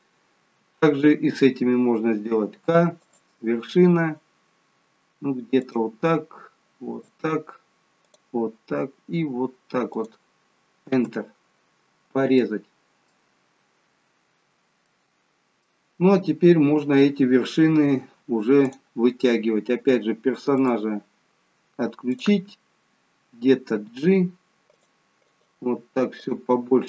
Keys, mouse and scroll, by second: 12.0-12.4 scroll down 1, 12.4 middle click, 13.7-15.0 scroll up 1, 15.0 middle click, 18.7 click, 20.7 click, 23.8 g, 25.4 click, 25.7 g.